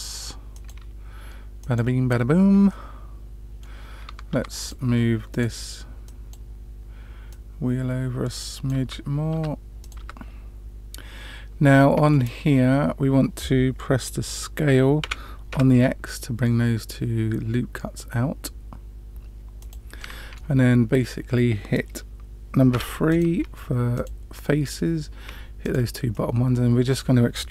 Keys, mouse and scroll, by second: 2.6 middle click, 4.3 Tab, 4.5-5.4 drag, 6.0 click, 7.3 click, 8.8 Tab, 9.3 Tab, 9.8 click, 10.0 Tab, 11.7 middle click, 15.0 s, 19.9 middle click, 22.7 3, 23.0 click, 23.9 click, 24.4 middle click, 25.6 shift+click, 26.1 middle click.